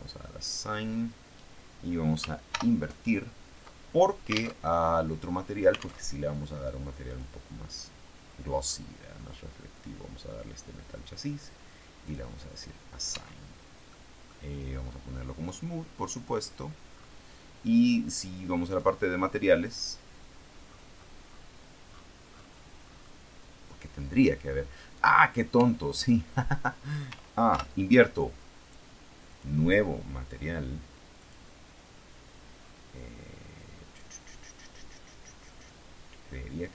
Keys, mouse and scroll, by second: 2.4 ctrl+i, 4.5 alt+Tab, 6.0 alt+Tab, 7.0 click, 8.1-8.8 scroll down 2, 8.8-9.4 scroll down 1, 9.6 click, 12.0 click, 13.0 Tab, 13.8 middle click, 15.4 click, 15.9-16.6 scroll down 1, 16.6-17.8 scroll down 1, 18.6 click, 19.6 click, 21.0-21.6 scroll down 2, 21.8-23.5 scroll up 2, 25.5 Tab, 27.4 ctrl+i, 29.2 click, 31.1 click, 32.5-33.1 scroll down 2, 33.1-34.2 scroll down 1, 34.2 scroll down 1, 36.5 click.